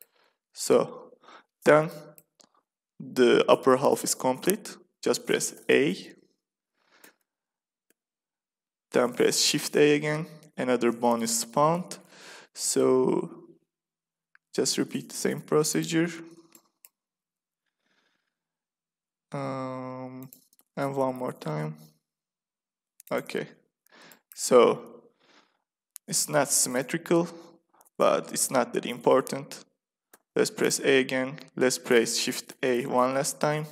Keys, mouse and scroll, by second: 5.4 a, 6.9 a, 7.8 a, 9.1 shift+a, 9.8-11.0 middle drag, 13.0 g, 16.0 middle click, 17.1 e, 20.6 e, 23.5 click, 24.4 a, 24.7 a, 30.0 a, 32.4 shift+a.